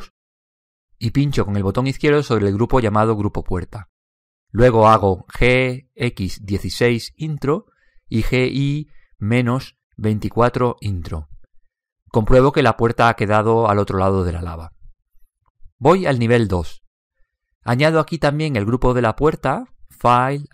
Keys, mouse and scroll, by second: 3.5 click, 5.8 g, 9.2 g, 12.8-14.8 middle drag, 15.8-16.8 scroll up 1, 16.8 middle click, 17.1 click.